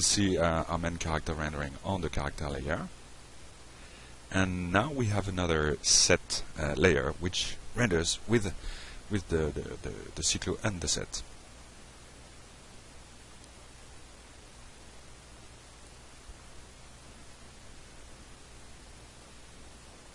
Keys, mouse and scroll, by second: 0.6 click, 1.8 click, 2.2 f, 2.7 F5, 6.7 click, 9.5 click, 11.0 click, 17.0 click, 17.6 click, 17.9 click, 19.0 click, 19.5 click.